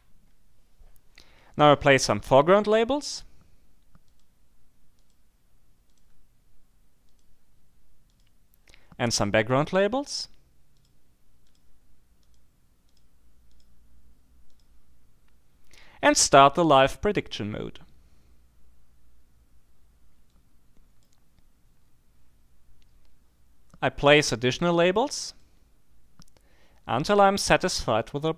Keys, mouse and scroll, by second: 4.1 click, 5.0 click, 5.9 click, 7.1 click, 8.1 click, 9.7 click, 10.7-11.3 scroll up 2, 11.5-12.0 scroll up 2, 12.2 click, 13.5 click, 14.5 click, 20.3-21.5 drag, 25.3 click.